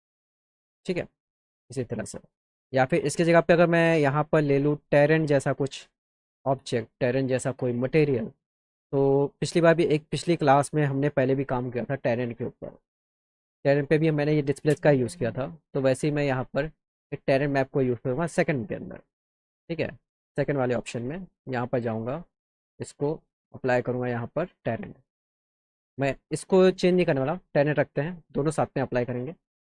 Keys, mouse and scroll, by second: 0.3-1.5 alt+middle drag, 6.3 click, 6.9 click, 13.7 click, 13.9 click, 15.8 click, 16.1 click, 20.5 click, 22.3 click, 23.8 click, 25.8 click, 27.1 click, 29.6 click.